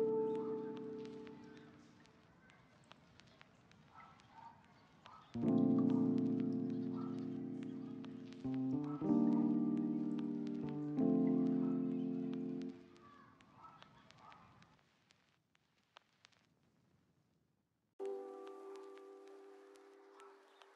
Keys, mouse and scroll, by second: 0.2 double click, 1.2 ctrl+middle click, 1.9 shift+middle click, 2.1 ctrl+middle click, 2.8 double click, 3.7 shift+middle click, 4.7 double click, 5.4 middle click, 6.2 ctrl+middle click, 6.5 middle click, 6.7 shift+middle click, 6.9 middle click, 7.1 ctrl+middle click, 7.3 shift+middle click, 7.7 shift+middle click, 8.3 double click, 8.9 middle click, 9.7 shift+middle click, 10.1 ctrl+z, 10.5 double click, 11.5 ctrl+z, 11.6 ctrl+z, 11.8 middle click, 12.5 ctrl+middle click, 12.9 shift+middle click, 13.6 double click, 14.8 middle click, 15.3 shift+middle click, 15.6 shift+middle click, 15.9 double click, 16.1 middle click, 16.6 middle click, 17.1 double click, 18.9 middle click, 19.6 double click.